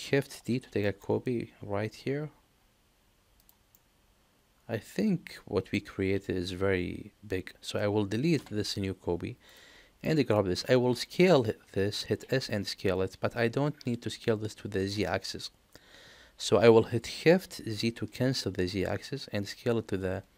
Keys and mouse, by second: 0.4 shift+d, 3.7-5.3 middle drag, 5.4 middle click, 8.3 Delete, 9.4 click, 10.0 middle click, 12.0 s.